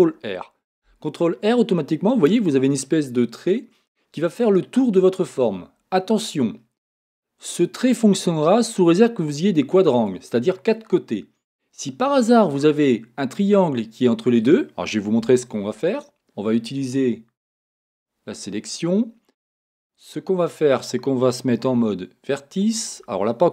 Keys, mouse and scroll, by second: 1.6 ctrl+r, 17.7-21.7 drag, 21.7 1, 22.9 click.